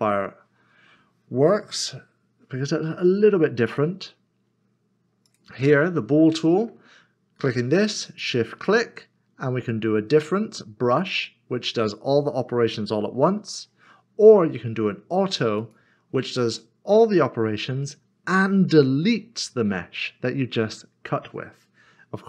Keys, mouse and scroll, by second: 0.3 click, 0.4-1.8 scroll down 1, 1.9 typing, 6.3 click, 6.5 middle click, 8.2 shift+click, 11.0 click, 13.3 ctrl+z, 15.6 click.